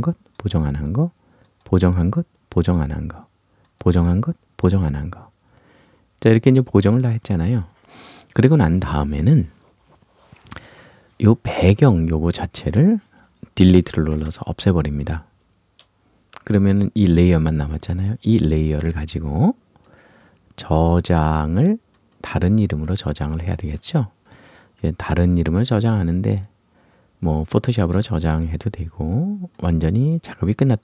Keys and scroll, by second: 14.1 Delete.